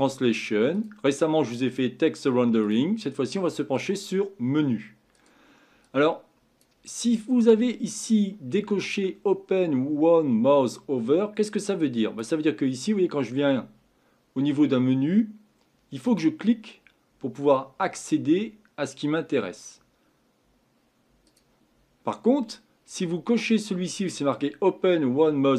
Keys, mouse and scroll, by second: 16.0-19.2 drag, 21.3 click.